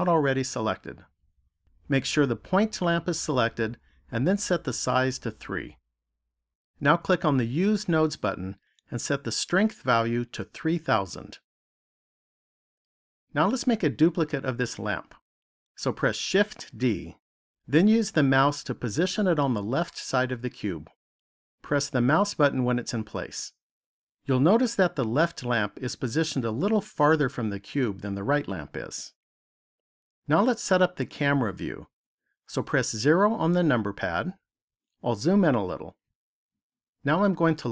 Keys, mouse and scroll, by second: 3.8 click, 7.8 click, 10.0 click, 11.3 KP_0, 16.3 shift+d, 21.9 click, 32.8 KP_0, 34.9-35.5 scroll up 1, 35.5 scroll up 1.